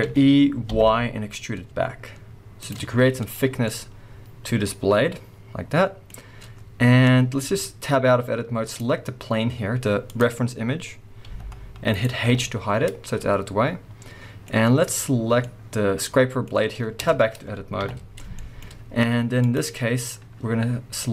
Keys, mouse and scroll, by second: 0.0 e, 2.7 shift+click, 2.9 z, 3.5 scroll down 1, 3.6 middle click, 6.2-7.4 scroll up 1, 7.4 Tab, 8.6 click, 10.1 click, 10.6 scroll down 1, 11.2 g, 12.0 right click, 12.3 h, 12.8 scroll down 1, 13.1-14.8 middle drag, 14.5-14.8 scroll up 1, 14.8 click, 15.4-16.9 middle drag, 16.4-16.9 scroll up 2, 16.9 Tab, 17.8 KP_3, 18.3 shift+middle click, 18.6 scroll up 1, 19.0 z, 21.0 click.